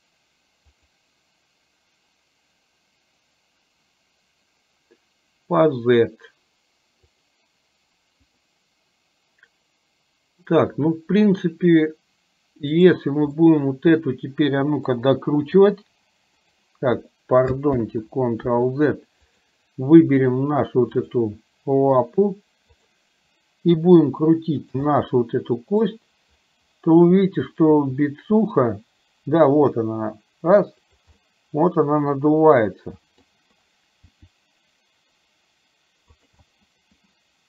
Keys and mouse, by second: 12.9 click, 13.4-15.0 middle drag, 15.6 r, 17.8 ctrl+z, 19.4 click, 21.3-22.3 drag, 23.9 r, 25.0-26.0 middle drag, 27.8 r, 31.3-33.4 middle drag, 34.3 r, 36.5-37.4 middle drag.